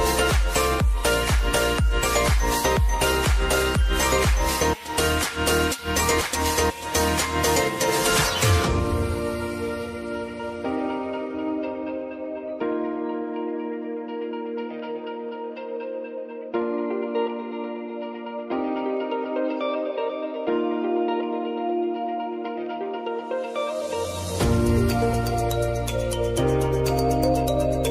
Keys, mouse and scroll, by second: 1.0-5.4 drag, 5.9-6.4 alt+scroll up 1, 7.0-9.2 drag, 9.2 ctrl+alt+Home, 10.0 v, 10.8-14.9 drag, 14.9 p, 15.5 click, 17.0 s, 17.3 click, 18.0 u, 18.7 space, 20.2 v, 20.6 space, 20.7 click, 21.1 space, 23.3 click, 24.3 ctrl+alt+Page_Up, 25.4 ctrl+alt+Home, 27.1 Home, 27.1 space.